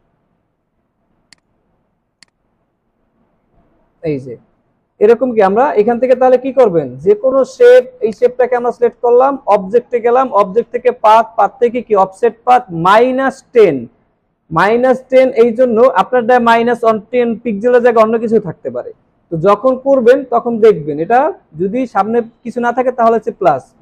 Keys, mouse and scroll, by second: 19.9 alt+scroll up 1.